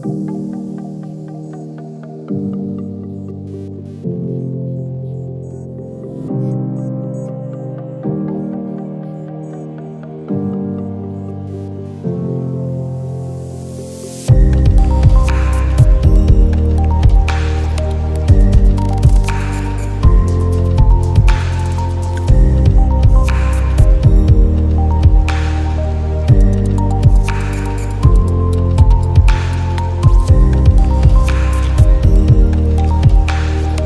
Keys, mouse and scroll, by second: 1.0 click, 5.6 click, 7.1 click, 9.6 click, 9.6 ctrl+z, 9.9-16.7 drag, 16.9 space, 17.2 click, 17.3 space, 18.5 click, 19.1 ctrl+z, 20.0 click, 25.5 click, 29.1 click, 30.8 click.